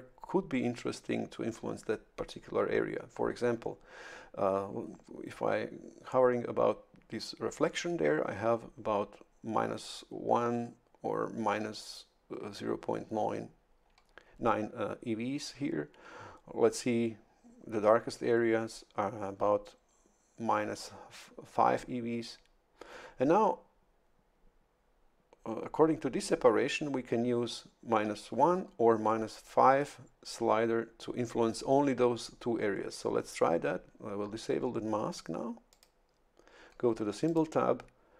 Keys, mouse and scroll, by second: 35.7 click, 37.3 click.